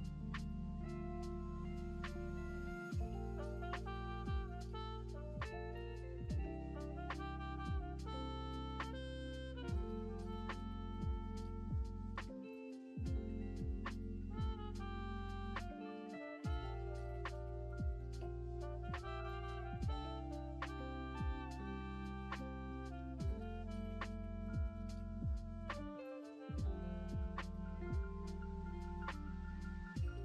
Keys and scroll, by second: 17.3 ctrl+c, 19.0 ctrl+v, 20.1 s, 23.5 ctrl+z.